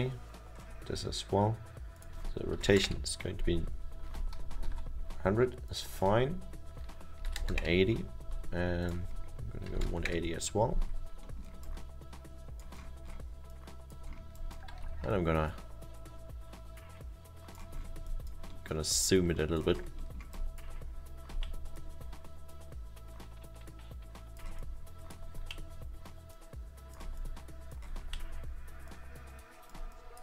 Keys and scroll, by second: 2.4-3.2 typing, 4.7 ctrl+z, 7.1-8.0 typing, 9.6-10.5 typing, 14.9 r, 23.4 w, 27.5 e.